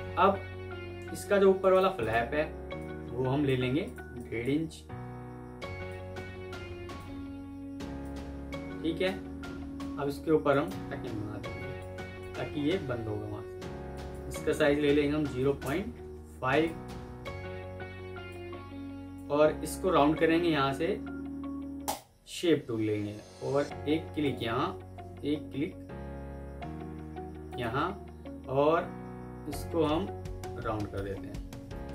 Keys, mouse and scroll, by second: 1.5 right click, 4.1 double click, 10.4 right click, 11.3 F2, 12.4 alt+scroll up 1, 14.5-15.3 typing, 15.5 Return, 27.4 shift+click.